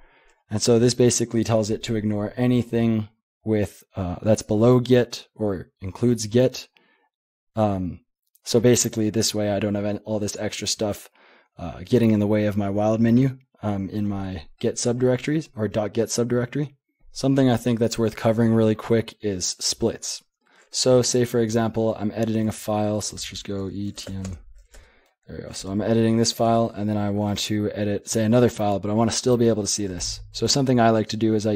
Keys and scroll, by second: 22.4 typing, 23.7-24.8 typing, 25.6 Return, 26.1-26.9 typing.